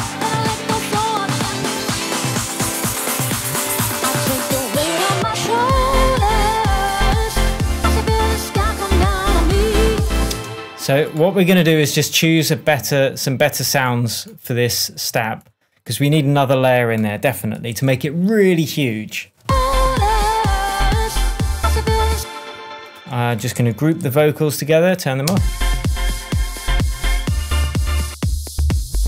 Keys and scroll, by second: 3.7 super+z, 10.3 space, 17.7 super+l, 19.4 space, 22.1 space, 23.1 shift+space, 24.0 shift+super+g, 24.6 super+g, 25.2 space.